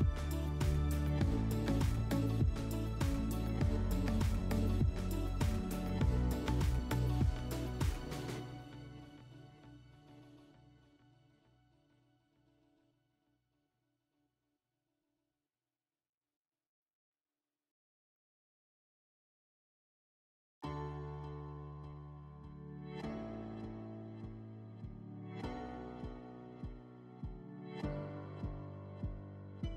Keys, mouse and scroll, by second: 1.0 click, 2.6 right click, 3.1 alt+w, 4.3 alt+middle click, 6.3 alt+middle click, 11.0 click, 12.4 click, 12.6 click, 13.5-13.9 typing, 14.9 click, 15.1 click, 15.5-16.3 typing, 16.6 Return, 21.6 click, 22.5 click, 23.6 alt+middle click, 24.4 click, 25.0 alt+middle click, 25.9 click, 26.4 alt+middle click, 29.0 click.